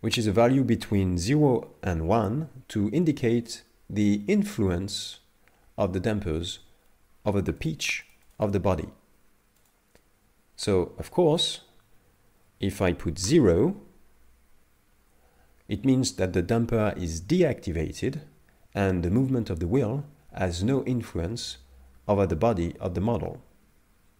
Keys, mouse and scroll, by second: 7.6 click, 8.1 click, 8.3 click, 8.5 click, 9.6 click, 11.3 click.